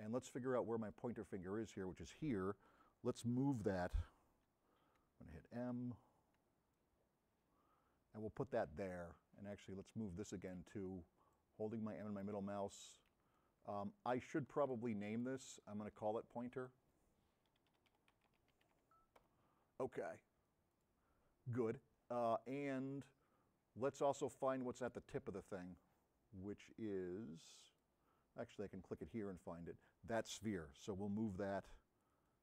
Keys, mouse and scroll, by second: 6.8 m, 9.6-10.6 middle drag, 10.6 m, 11.4-12.3 middle drag, 17.7 p, 19.3 Return, 25.2 scroll up 2, 25.4-27.8 scroll down 2, 31.6 m, 32.3-32.4 drag.